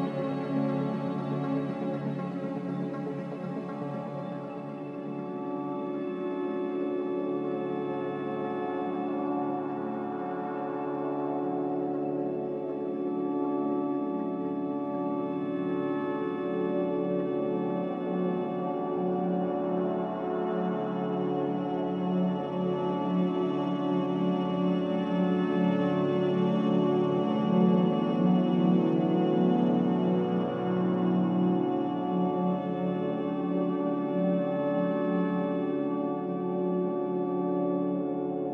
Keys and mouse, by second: 2.9 ctrl+z, 7.2 Tab, 7.7 alt+z, 8.5-8.9 middle drag, 8.9 middle click, 9.2 middle click, 13.2 3, 13.6 a, 14.3 click, 16.4 Tab, 17.7 3, 18.1 a, 19.7 e, 25.5 middle click, 26.5-31.1 middle drag, 31.8 ctrl+z, 32.9 e, 38.4-38.5 middle drag.